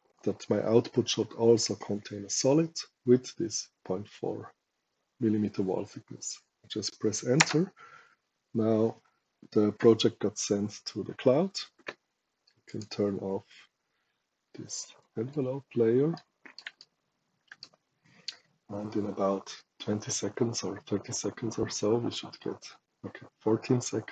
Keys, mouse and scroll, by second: 7.3 Return, 12.6 click, 14.9 click, 16.1 right click, 16.7 shift+right click.